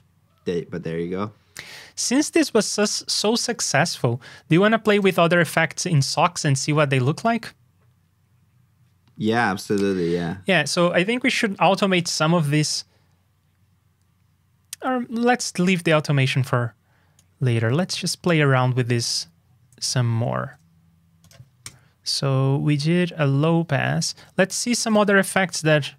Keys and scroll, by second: 9.6 super+j, 20.1 alt+shift+Down, 24.1 super+Tab, 25.5 super+Up.